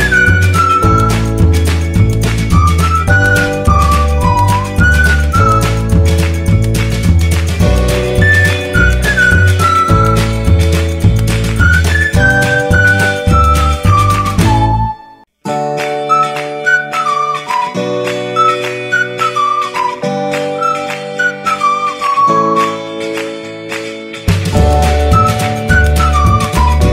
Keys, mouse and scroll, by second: 1.0-1.7 typing, 3.8-5.8 typing, 7.5 click, 9.2 ctrl+t, 10.2-18.4 alt+drag, 18.4 Return, 21.7 click.